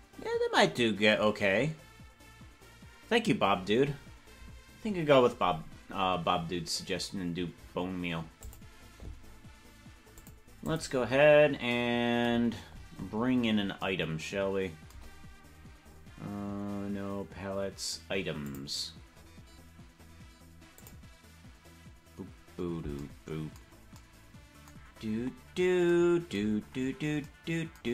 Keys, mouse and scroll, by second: 8.4 click, 10.1 click, 10.6 click, 12.4-13.1 scroll down 20, 13.1 scroll up 2, 13.3-13.7 scroll down 2, 15.5-18.2 scroll down 1, 18.2 scroll down 3, 18.4 click, 19.1 scroll down 1, 19.1-22.2 scroll down 2, 22.2 click, 22.2 scroll down 1, 24.8 scroll down 3, 24.9 scroll up 1, 25.1 scroll down 1, 25.3-25.7 scroll down 3, 26.7-27.3 scroll up 2.